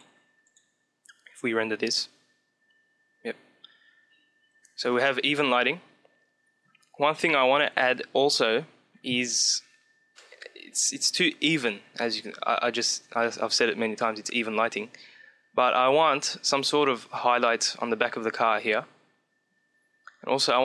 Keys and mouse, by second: 1.1 click, 1.5 click, 3.0-6.0 middle drag.